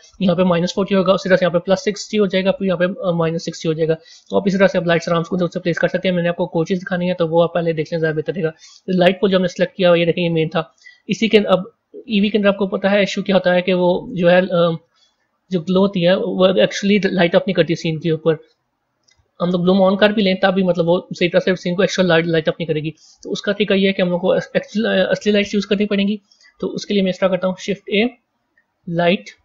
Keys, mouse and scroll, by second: 4.5 a, 6.1-8.8 middle drag, 8.8 click, 11.9 z, 13.8-14.3 scroll up 5, 15.0-17.9 middle drag, 17.9 click, 24.4 KP_1, 27.3 shift+a.